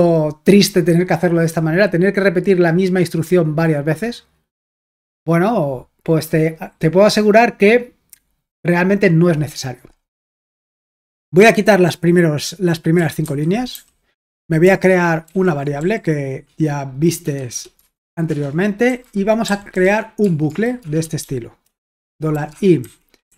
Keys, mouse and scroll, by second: 0.5-1.5 scroll down 1, 1.5-2.7 scroll down 1, 2.7-4.4 scroll down 1, 4.4-5.1 scroll up 1, 5.1-5.9 scroll up 1, 5.9-8.4 scroll up 1, 8.4 scroll up 1, 9.1-10.2 drag, 12.7-14.2 typing, 15.3-15.8 typing, 17.3-23.3 typing, 18.3 Return.